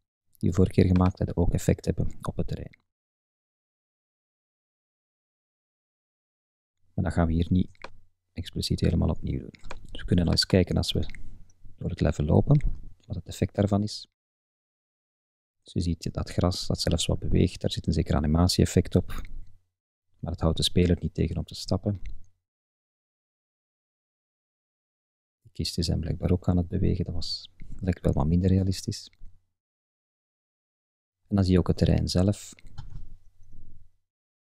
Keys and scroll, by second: 13.4 Up, 13.7 Left, 14.1 Up, 14.4 Right, 14.6 Up, 14.9 Right, 15.1 Up, 15.5 Right, 15.7 Up, 16.3 Left, 16.4 Up, 18.2 Left, 18.8 Up, 19.9 Left, 20.1 Up, 20.4 Left, 20.8 Up, 22.1 Left, 22.3 Up, 22.7 Right, 22.9 Up, 24.6 Right, 24.6 Up, 26.6 Left, 27.0 Up, 27.3 Left, 27.7 Up, 28.5 Right, 28.7 Up, 29.2 Left, 29.6 Up, 30.5 Left, 30.8 Up, 31.4 Left, 31.5 Up, 32.8 Left, 33.0 Up, 33.5 Right, 33.8 Up, 34.3 shift+Left, 34.4 shift+Up.